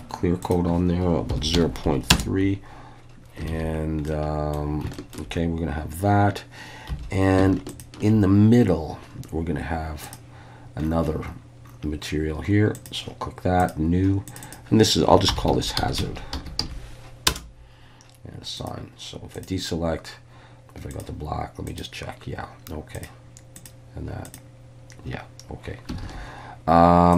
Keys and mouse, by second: 0.4-2.6 drag, 3.5 alt+a, 4.1 middle click, 4.9 shift+middle click, 6.9 3, 7.8 alt+shift+click, 10.1 click, 12.8-13.7 drag, 14.3 click, 14.4-17.9 drag, 18.6 click, 19.4-21.0 drag, 21.7 click, 22.9 click, 23.6 click, 24.2 click, 26.0 alt+a.